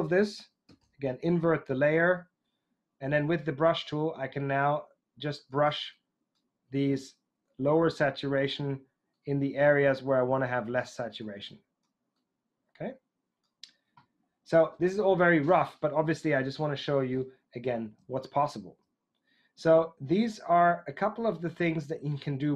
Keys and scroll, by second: 0.8 super+i.